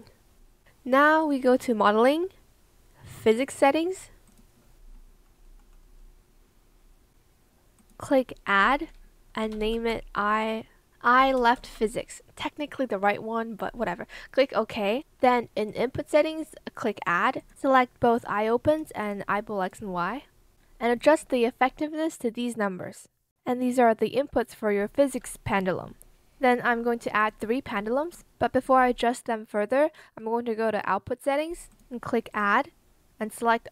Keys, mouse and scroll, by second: 11.1-12.0 typing.